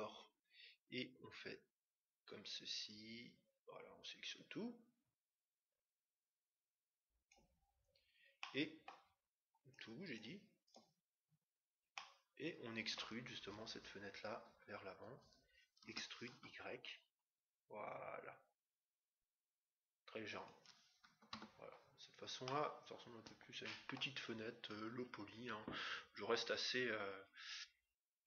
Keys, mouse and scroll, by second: 11.9-13.7 middle drag, 15.7 e, 21.3 Tab, 21.9-24.0 middle drag, 24.3-26.0 scroll up 1, 26.0-26.9 scroll up 1, 26.9-27.9 middle drag, 27.9 scroll down 1.